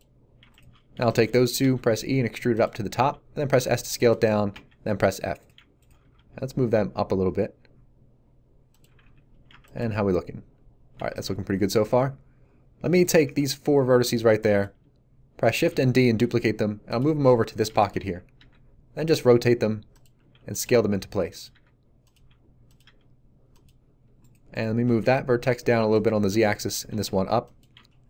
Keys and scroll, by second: 1.6 e, 2.9 s, 4.5 f, 6.1 g, 8.8 a, 13.2 b, 15.5 shift+d, 18.3 r, 20.1-22.8 typing, 25.0 z, 26.8 g, 26.9 z.